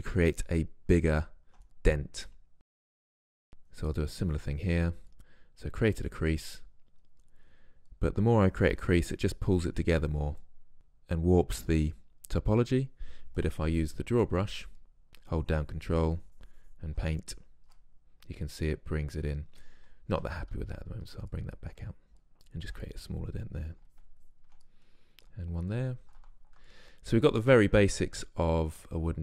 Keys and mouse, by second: 0.3-0.8 middle drag, 2.9-5.5 drag, 5.5 middle click, 6.9-8.0 drag, 8.7-10.5 drag, 13.5-15.1 drag, 15.4-20.3 drag, 20.3 ctrl+z, 20.7 ctrl+z, 22.3-29.2 middle drag.